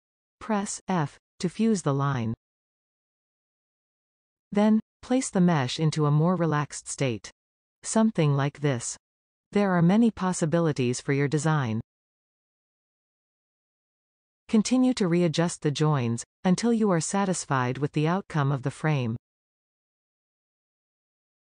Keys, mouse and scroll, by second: 0.9 f, 1.7-4.3 middle drag, 4.3-5.4 scroll up 1, 5.6 click, 6.6 g, 9.8-10.1 scroll down 1, 10.1-15.0 middle drag, 15.0 click, 16.1 g, 18.1 click, 18.4 g, 20.8 scroll down 2, 21.1-21.4 middle drag.